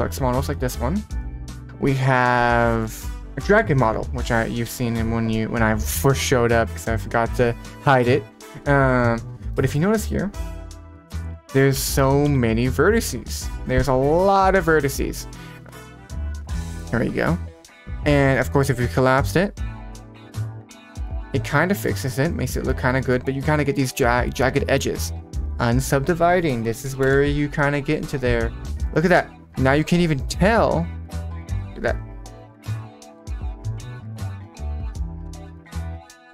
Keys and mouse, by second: 0.1 click, 0.7 middle drag, 8.8 click, 9.5 middle click, 10.4 Tab, 10.7 middle click, 12.2 a, 19.1-20.2 drag, 21.5 Tab, 21.5 middle click, 22.6-23.1 middle drag, 25.8-27.4 drag, 28.7-29.0 middle drag, 30.2 middle click, 31.3-33.3 drag, 34.6-36.3 drag.